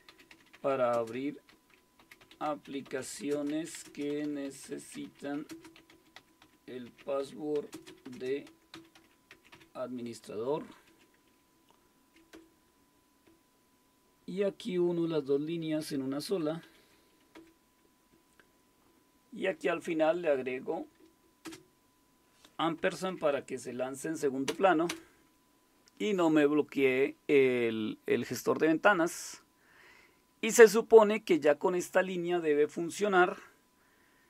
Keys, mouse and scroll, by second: 0.0-9.5 typing, 10.6-14.8 typing, 14.9 Right, 15.1 Right, 15.6 Right, 16.4-20.3 typing, 20.5 Right, 20.7 Right, 21.4 space, 22.8-23.1 typing, 24.5 Return, 24.9 Return, 25.3 typing.